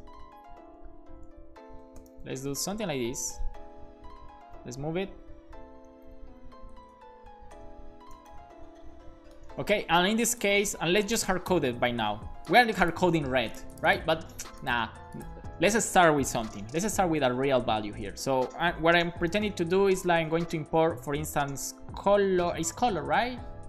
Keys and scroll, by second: 0.4 super+Right, 0.6 Return, 1.3-3.2 typing, 3.2 Return, 3.6 Down, 4.4 alt+Up, 5.1 Down, 5.2 Down, 5.4 Down, 5.9 Down, 6.1 alt+Up, 6.7 Left, 6.9 Left, 7.0 Left, 7.5 Left, 7.7 Up, 7.9 Left, 9.3 BackSpace, 9.4 super+s, 16.3 Return, 16.8 Up, 16.8 Down, 17.3 Return, 18.9 Down, 20.9-21.8 typing, 22.8 Return, 23.4 super+s.